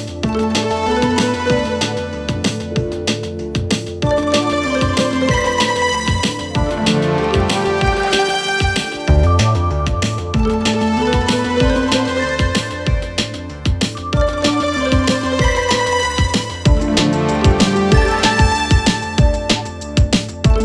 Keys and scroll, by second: 16.1 ctrl+F1, 16.7 2.